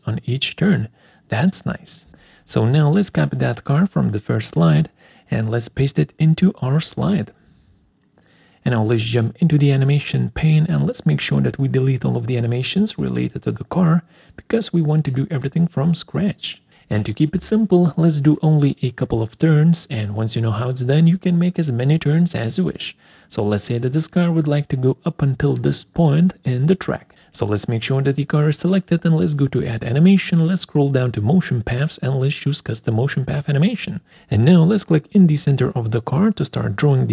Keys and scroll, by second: 7.1 ctrl+c, 9.5 ctrl+v, 17.8 Delete.